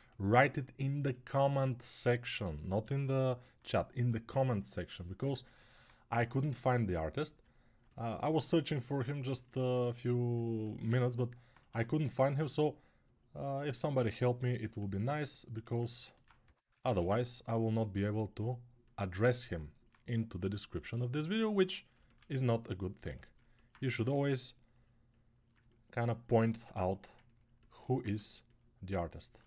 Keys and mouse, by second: 0.3-8.1 right drag, 11.4 1, 16.2 g, 21.8-27.8 ctrl+alt+shift+drag, 23.6 1.